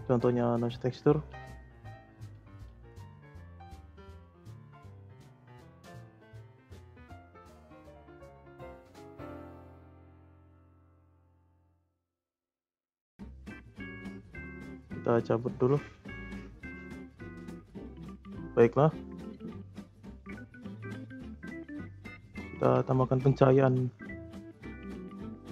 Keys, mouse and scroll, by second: 0.9 click, 1.0 shift+a, 4.0 click, 5.5 click, 6.2 click, 7.4 click, 9.0 click, 10.8 scroll up 4, 11.3 middle click, 12.0-14.1 scroll up 1, 14.7 click, 15.5 scroll down 2, 18.6 scroll up 1, 18.6-19.8 middle drag, 19.8-20.2 scroll down 2, 20.2-20.6 shift+middle drag, 20.6 scroll up 3, 20.9-22.0 middle drag, 22.0-22.5 scroll down 3, 22.5 shift+a.